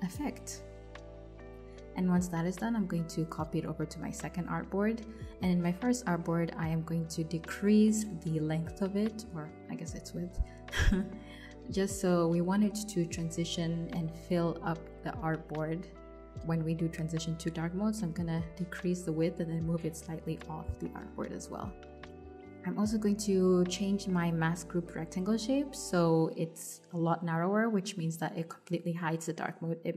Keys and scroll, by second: 2.3 super+c, 3.1 super+v, 3.9 super+[, 4.5 super+[, 9.3 super+z, 10.2 super+z, 11.6 super+z, 13.6 shift+super+z, 15.4 super+z, 18.2 shift+Right, 23.7 super+z.